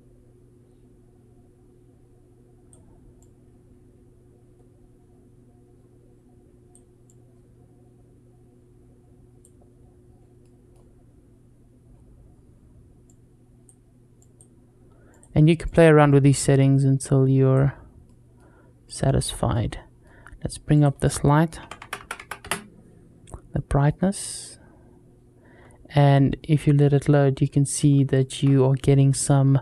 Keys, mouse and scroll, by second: 10.2-10.5 middle drag, 12.9 click, 14.0-15.0 drag, 15.5-17.6 drag, 17.9 middle click, 18.7-19.3 drag, 19.3-19.9 middle drag, 20.6-22.8 drag, 21.8 KP_0, 23.3-23.7 middle drag, 27.7 scroll up 1, 28.0 shift+middle drag, 28.4 scroll up 2.